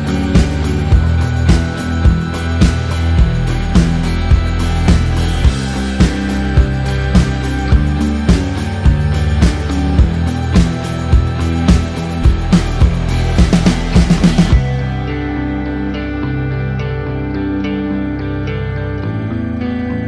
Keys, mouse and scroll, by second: 3.9-5.1 typing, 4.7 Tab, 5.2 Tab, 5.9 KP_Enter, 7.7 KP_Enter, 9.8 right click, 10.0 click, 16.7 KP_2, 17.4 KP_Enter.